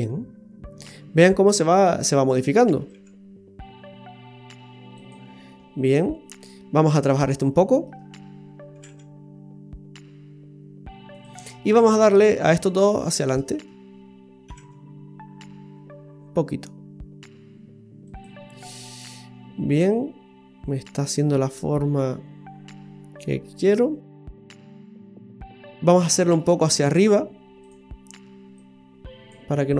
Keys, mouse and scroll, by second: 2.8 g, 5.5 middle click, 7.1 right click, 7.4 middle click, 8.7 g, 12.5 right click, 13.2 shift+right click, 14.5 g, 18.6 middle click, 26.1 middle click, 26.7 click, 27.6 click, 28.6 click, 29.5 middle click.